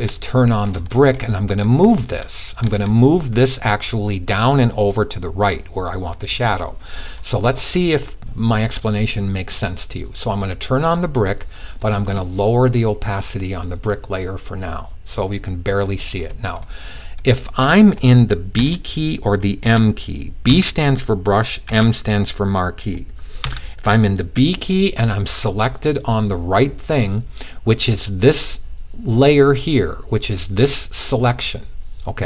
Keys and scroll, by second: 18.1-19.0 typing, 20.1 typing, 21.1 typing, 22.9 typing.